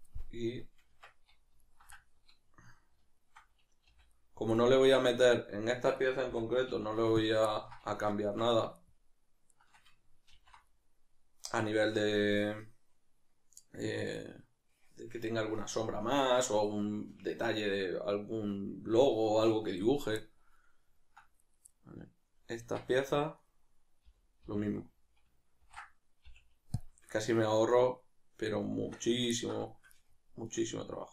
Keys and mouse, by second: 0.9 Tab, 1.6 alt+right click, 3.2-3.9 alt+shift+right drag, 3.9 v, 4.2-4.6 right drag, 4.6-5.9 middle drag, 5.9 right click, 6.3 l, 7.5-8.3 ctrl+middle drag, 8.3 Tab, 8.8-9.6 shift+right drag, 10.3 ctrl+j, 10.7-15.5 middle drag, 20.6-21.4 middle drag, 21.4 right click, 21.7-22.6 middle drag, 22.6 Tab, 23.4 right click, 27.1-28.8 shift+middle drag, 28.8 Tab, 29.4-30.4 ctrl+middle drag, 30.4 right click.